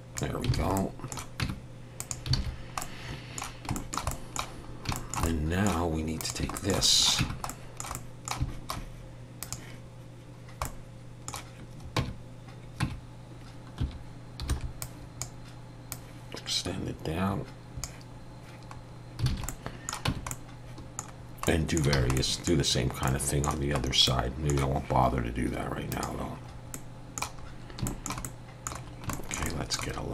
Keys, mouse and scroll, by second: 0.6 alt+a, 0.8 middle click, 1.4 Tab, 2.0 click, 2.4 alt+a, 2.5 scroll down 2, 2.8 middle click, 3.7 shift+middle click, 4.1 middle click, 4.7 scroll down 2, 4.9 shift+middle click, 5.2 middle click, 6.2 click, 6.6 shift+middle click, 6.8 middle click, 7.2 Tab, 7.5 middle click, 8.0 middle click, 8.0 shift+middle click, 9.4 click, 10.6 middle click, 12.0 Tab, 12.8 Tab, 13.8 1, 14.5 b, 15.9 click, 18.8 scroll down 2, 19.3 alt+a, 19.5 middle click, 20.1 Tab, 20.3 middle click, 21.2 scroll down 1, 21.5 middle click, 22.0 alt+a, 22.2 middle click, 22.8 scroll down 1, 23.1 middle click, 23.8 scroll up 2, 24.1 middle click, 26.0 click, 26.5 scroll up 2, 26.7 middle click, 27.4-27.7 scroll up 1, 27.9 shift+middle click, 28.2 middle click, 28.8 scroll down 2, 29.1 shift+middle click, 29.5 middle click.